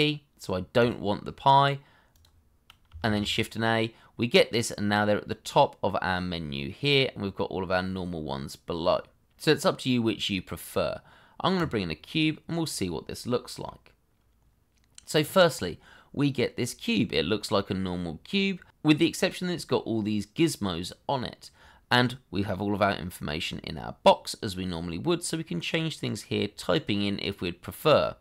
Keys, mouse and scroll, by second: 3.0 shift+a, 7.4-7.9 scroll down 1, 12.6-13.6 scroll up 1, 13.6 middle click, 19.3-19.9 scroll down 1.